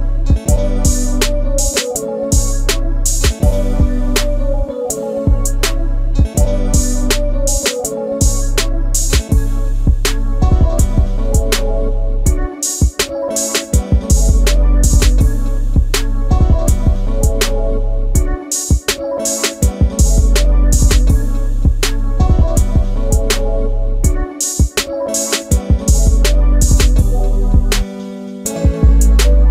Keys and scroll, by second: 2.2 a, 3.9 space, 9.9 e, 10.8 space, 12.1 e, 12.8 space, 21.1 space, 21.2 Escape, 21.3 Escape, 21.4 Escape, 21.7 Escape, 25.9 c, 27.4 space.